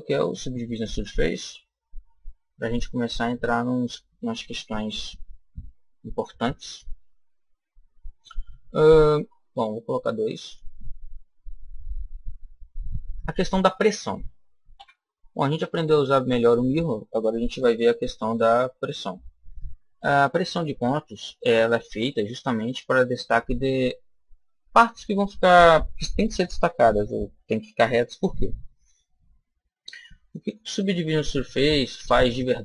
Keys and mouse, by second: 10.2 click, 11.5-13.3 middle drag, 14.7 KP_1, 15.6-19.5 middle drag.